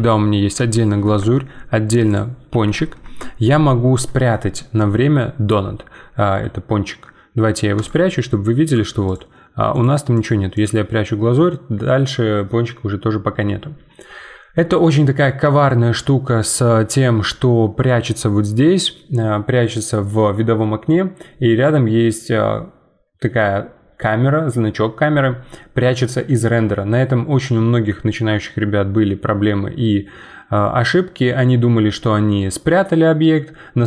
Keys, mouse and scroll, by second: 2.0 click, 2.5 g, 7.7-13.5 drag.